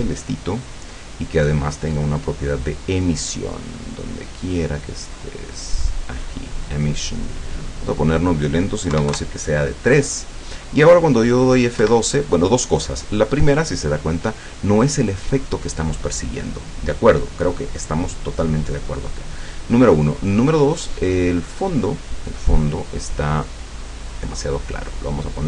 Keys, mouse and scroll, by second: 1.8 click, 4.5-4.8 scroll down 2, 5.2-5.8 scroll up 4, 6.7 click, 8.0 click, 9.0 KP_3, 9.2 KP_Enter, 11.8 F12, 20.7 click, 21.6 click, 22.4 click, 23.2 click, 24.1 click.